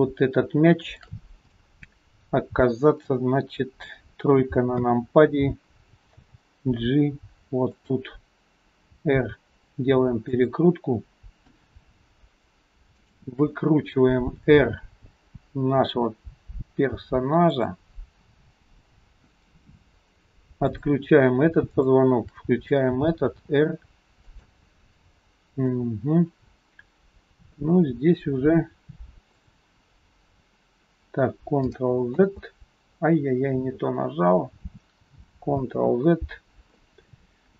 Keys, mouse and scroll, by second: 0.0 shift+click, 0.9 shift+click, 1.6 middle click, 4.8 KP_3, 6.3 g, 9.0 r, 11.3-11.9 scroll down 2, 13.0 shift+click, 14.4 r, 20.8 shift+click, 22.4 shift+click, 23.4 r, 25.7 middle click, 29.4 click, 32.1 ctrl+a, 35.7 ctrl+z.